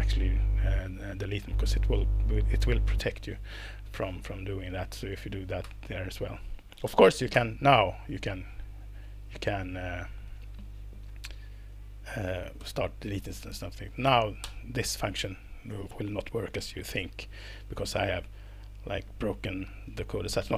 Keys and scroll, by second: 4.9 Up, 5.6 BackSpace, 7.3 BackSpace, 12.6 BackSpace, 14.4 alt+Return, 19.4 Escape.